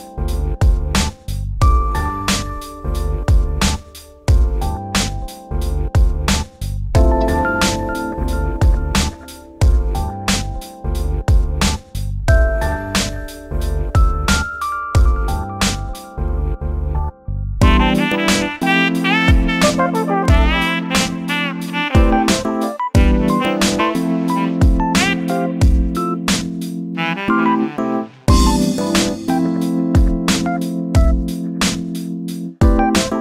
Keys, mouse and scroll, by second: 0.9 ctrl+shift+b, 3.2 Tab, 4.1 ctrl+a, 6.4 Tab, 7.4 ctrl+shift+b, 12.1 a, 12.5 a, 14.3 ctrl+shift+b, 20.1 scroll up 1, 20.3-20.6 scroll down 2, 20.6 Tab, 21.2 shift+a, 22.8 Tab, 24.0 s, 25.2 g, 27.9-29.6 scroll up 9, 30.6 g, 32.5 g.